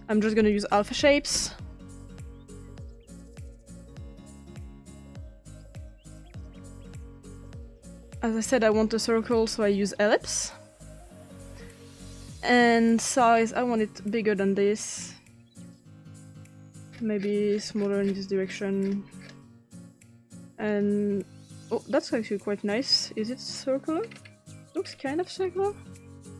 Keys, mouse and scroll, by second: 0.7-1.4 typing, 2.8-3.7 drag, 4.4 click, 7.2 click, 7.8 click, 10.3 click, 13.4 click, 17.0 scroll down 2, 17.5-18.6 scroll down 5, 18.6 scroll up 1, 18.8-19.3 scroll down 3, 20.7 click, 24.0-24.9 scroll up 2, 24.9-26.3 scroll up 1.